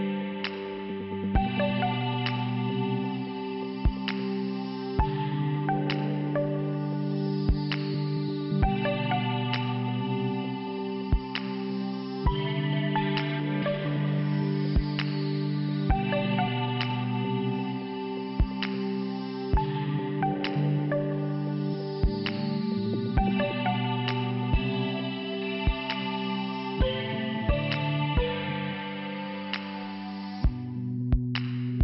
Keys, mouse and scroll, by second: 8.5 click, 8.8 click, 10.1 click, 16.9 click, 17.2 click, 17.5 click, 17.8 click, 18.0 click, 20.1 click, 21.0 click, 22.5 click, 22.6 click, 24.3 click, 24.5 click, 24.6 click, 25.7 click, 25.8 click, 26.5 click, 26.6 click, 27.4 click, 28.7 scroll up 1, 28.7 click, 28.9 scroll down 1, 29.2 scroll down 1, 29.4 scroll up 1, 29.7-30.4 scroll down 1, 30.9 click, 31.7 click.